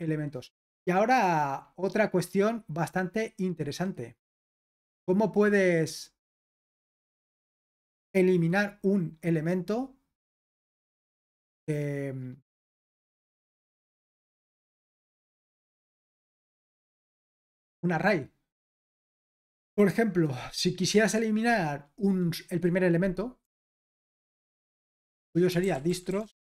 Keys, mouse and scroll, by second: 0.0-1.0 scroll down 2, 1.0-1.8 scroll down 1, 1.8-2.8 scroll up 2, 2.8-3.2 scroll up 1, 3.5-4.8 scroll down 2, 4.8-5.8 scroll down 1, 5.8 scroll down 1, 6.0-9.9 scroll up 2, 10.3-11.9 drag, 11.9-12.7 scroll down 2, 14.4-14.9 scroll down 2, 16.1-16.6 scroll down 2, 16.8-17.3 scroll down 2, 18.9 click, 19.3-22.3 scroll up 2, 23.8 typing, 25.4-26.5 typing.